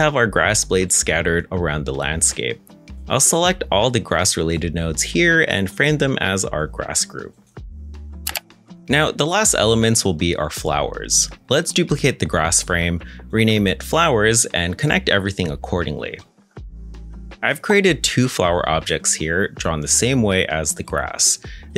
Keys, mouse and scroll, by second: 0.6 middle click, 1.8 scroll up 1, 2.5 middle click, 2.8-3.3 scroll up 1, 3.3-6.1 scroll down 1, 6.3-7.5 typing, 7.8 Return, 9.6 g, 11.6 middle click, 12.1 shift+d, 12.4 z, 14.0 F2, 14.9-15.6 typing, 15.8 Return, 16.3 middle click.